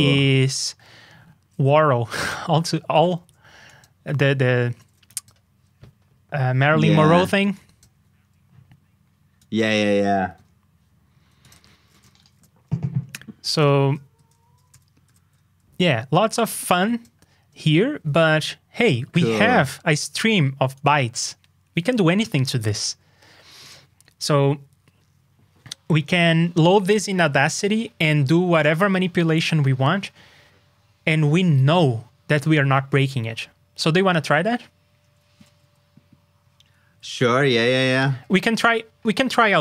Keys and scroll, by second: 12.3 super+j, 14.7 shift+super+k, 35.4 super+s.